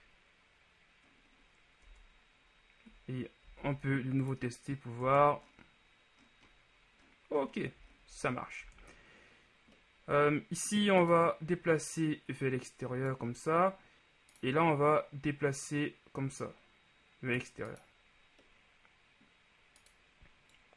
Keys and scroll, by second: 2.0 Tab, 3.6 w, 5.2 Tab, 8.8 shift+Tab.